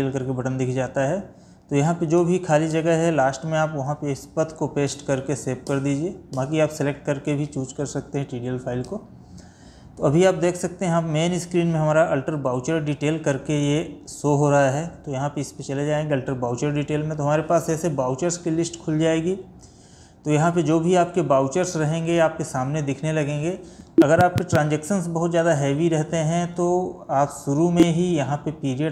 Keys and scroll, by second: 4.0 ctrl+v, 8.9 Escape, 18.3 Down, 25.9 Escape.